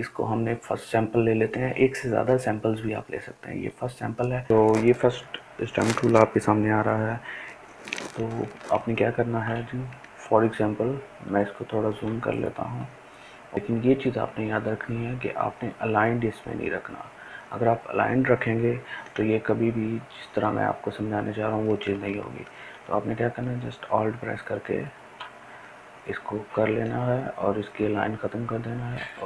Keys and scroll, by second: 11.6 ctrl+space.